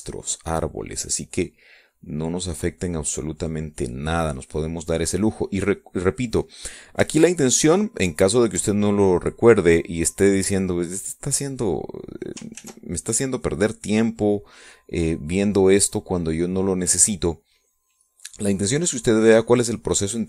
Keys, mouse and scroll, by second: 1.2-5.9 drag, 6.4 middle click, 6.9 click, 7.9-9.3 shift+drag, 10.3-12.9 drag, 13.2 ctrl+z, 16.2-19.0 drag, 19.2-20.2 drag.